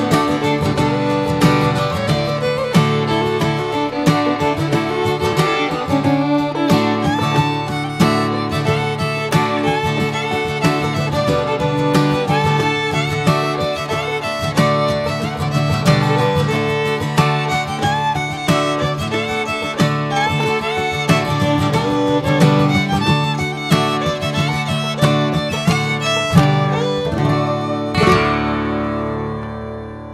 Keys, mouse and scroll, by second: 4.2 click, 4.5 middle click, 5.3 click, 7.7-10.4 middle drag, 10.4-21.2 drag, 21.2-21.7 middle drag, 21.7-22.0 scroll up 2, 22.0-23.4 middle drag, 23.4 scroll down 2, 23.7-26.9 middle drag, 26.9 click, 27.2-28.4 middle drag, 28.5-30.1 drag.